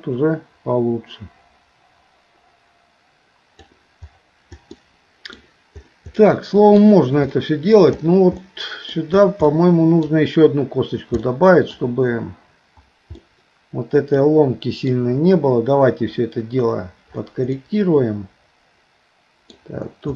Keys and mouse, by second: 4.7 middle click, 6.3 middle click, 7.4 shift+middle click, 8.5 middle click, 9.5 middle click, 11.2 middle click, 13.2-14.9 middle drag, 17.6-19.6 middle drag.